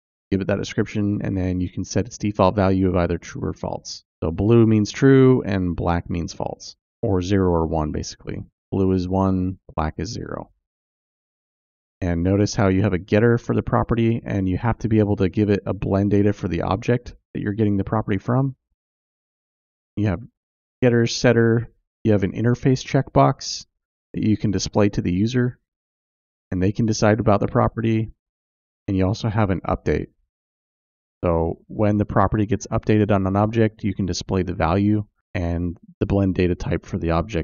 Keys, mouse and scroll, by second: 3.1 click, 4.3 click, 11.5-15.0 drag, 16.8-18.9 drag, 19.7 x, 20.7-23.9 drag, 27.1-32.0 drag.